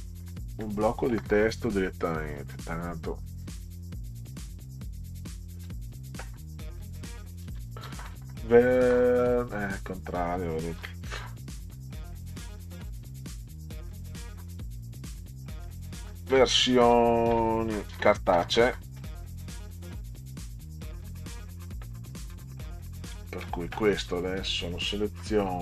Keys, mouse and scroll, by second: 0.5 Delete, 2.3 click, 3.3 click, 4.7 click, 5.0 click, 7.2-8.6 typing, 9.6 click, 10.8 Caps_Lock, 12.4 click, 13.4 click, 15.0-20.5 typing, 22.9-24.1 drag.